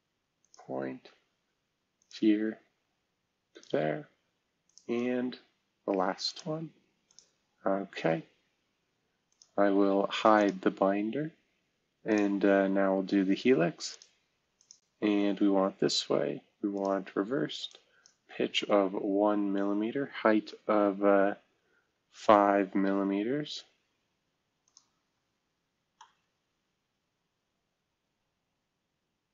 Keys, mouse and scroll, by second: 0.4 click, 1.9 click, 3.5 click, 4.6 click, 9.3 click, 9.8 space, 10.4 click, 12.1 click, 18.2 1, 18.5 Tab, 21.8 5, 22.1 Caps_Lock, 24.6 click, 25.6-26.5 scroll up 2.